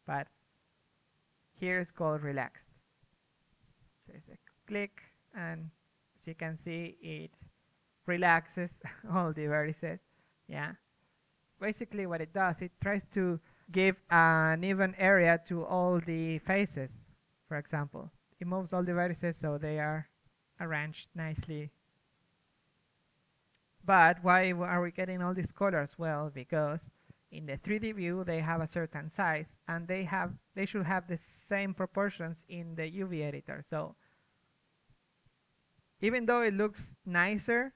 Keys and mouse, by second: 8.7-12.8 middle drag, 17.2 ctrl+z, 17.4 middle click, 20.4 ctrl+z, 21.0 f, 28.2-35.6 middle drag, 31.6 z, 32.5 z, 32.9 z, 35.4 a, 36.0 middle click, 36.1 z, 37.1-37.7 middle drag.